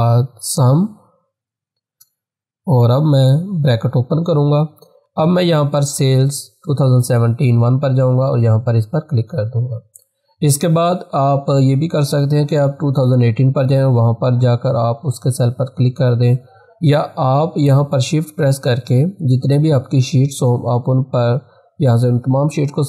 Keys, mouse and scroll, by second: 0.3-2.5 typing, 3.5 shift+9, 5.8 click, 8.3 click, 20.8 shift+Num_Lock, 21.4 shift+click.